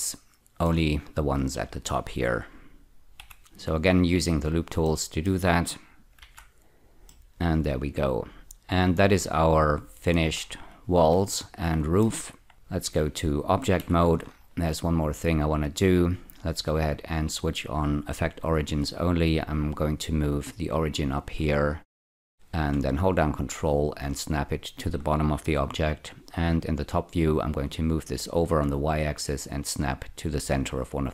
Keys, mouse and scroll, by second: 0.0 middle click, 3.2 ü, 4.9 middle click, 6.2 z, 7.1-10.2 middle drag, 10.5 scroll down 2, 11.4 shift+middle click, 12.9 Tab, 13.8 F4, 14.1-16.1 scroll down 5, 17.0 click, 18.3 click, 19.8-21.4 drag, 21.4-22.9 scroll up 8, 23.2-24.8 ctrl+drag, 25.8 F2, 27.4-29.0 drag.